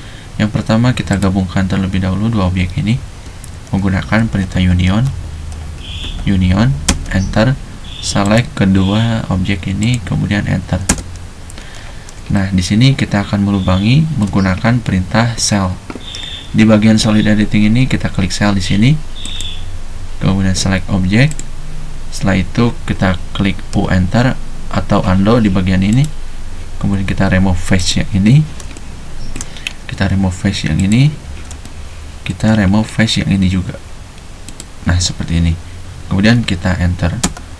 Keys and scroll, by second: 3.2 Escape, 4.3-4.9 typing, 6.0-6.8 typing, 10.8 space, 23.8 u, 37.3 space.